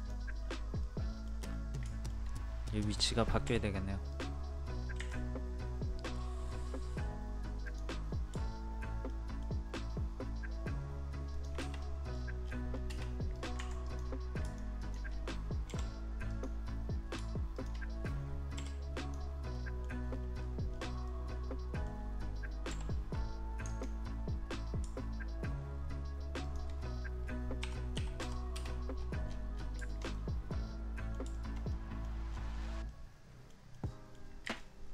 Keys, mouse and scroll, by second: 0.4 scroll up 1, 0.8 middle click, 1.5-1.9 scroll up 1, 1.9 middle click, 3.4 m, 4.1 click, 5.0 Escape, 6.5 scroll up 1, 7.6 click, 9.1 shift+middle click, 11.4 shift+click, 11.8 middle click, 12.1 scroll down 1, 13.3 click, 13.6 Escape, 13.8 click, 15.7 Delete, 17.5 shift+click, 18.6 shift+Delete, 19.0 click, 19.5 middle click, 20.1 scroll up 1, 21.1 middle click, 22.7 m, 23.7-24.7 ctrl+drag, 26.5 shift+click, 27.9 KP_3, 28.9 scroll down 1, 29.9 shift+middle click, 31.4-32.9 shift+middle drag, 34.6-34.9 drag.